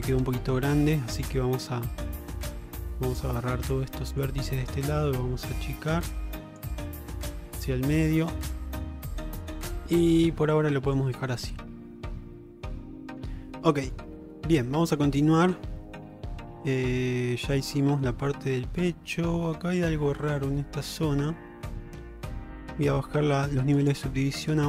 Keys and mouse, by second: 0.8 alt+z, 2.4 click, 4.3-6.7 drag, 7.1 Tab, 7.8 alt+z, 9.9-11.0 middle drag, 12.1-13.3 middle drag, 14.2-15.6 middle drag, 15.9 shift+middle click, 16.3-17.5 middle drag, 18.3-19.6 middle drag, 20.2 shift+middle drag, 20.6 middle click, 23.8 click.